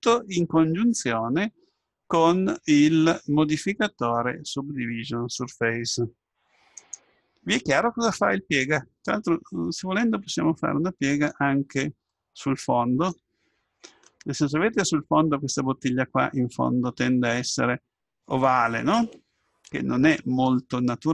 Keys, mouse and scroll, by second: 0.3-5.3 middle drag, 9.1-10.1 scroll up 1, 10.1-18.7 middle drag.